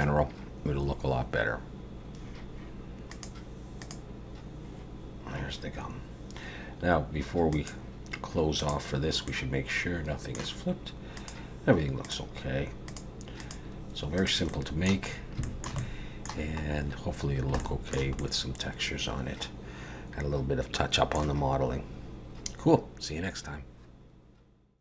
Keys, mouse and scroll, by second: 3.1 click, 7.5 click, 9.3 middle click, 11.2 click, 13.4 click, 14.2 click, 14.5 middle click, 15.1 scroll up 1, 15.4 shift+middle click, 15.8 middle click, 16.7 scroll up 2, 17.2 scroll down 2, 17.6 shift+middle click, 18.2 middle click.